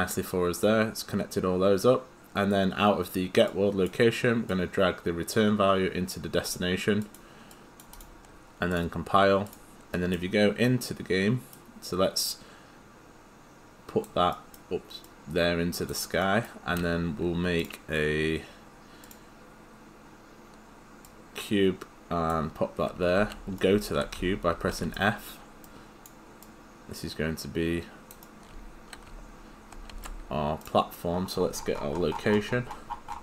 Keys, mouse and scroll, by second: 4.3 click, 9.5 click, 10.0 right click, 12.3 click, 14.4 right click, 15.1 click, 16.2 right click, 17.6 click, 23.2 f, 23.6 right click, 23.7 w, 24.2 s, 25.6 click, 28.3 right click, 28.5 d, 29.1 s, 29.9 right click, 30.6 click.